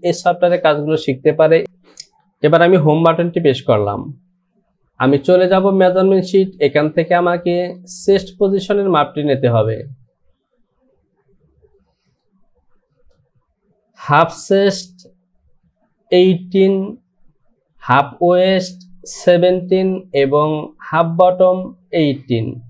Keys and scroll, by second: 3.9 Home.